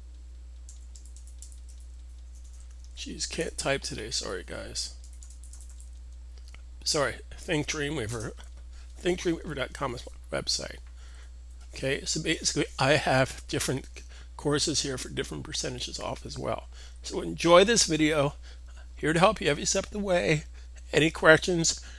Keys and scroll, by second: 0.5-2.2 typing, 4.1-5.5 typing.